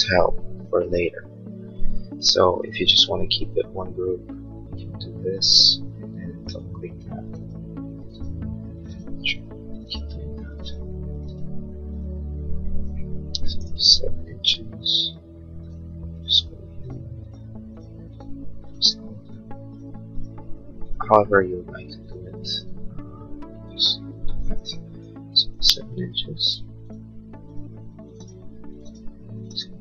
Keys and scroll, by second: 2.7 p, 13.4 7, 25.5 7, 25.7 Return.